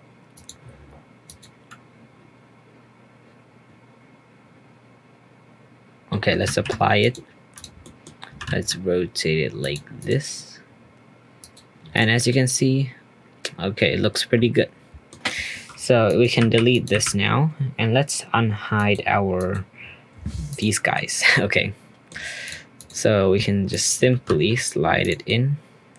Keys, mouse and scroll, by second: 6.5 ctrl+a, 7.0 click, 7.5 click, 7.8-8.3 middle drag, 8.3 r, 10.0 click, 11.4-12.0 drag, 12.3-15.3 middle drag, 16.0 click, 16.4 Delete, 16.7 click, 18.1 Delete, 18.7 click, 19.3 click, 20.5 click, 20.9-22.4 middle drag, 22.4 drag, 22.7 click, 23.7 shift+click, 24.1 g, 25.2-25.9 middle drag.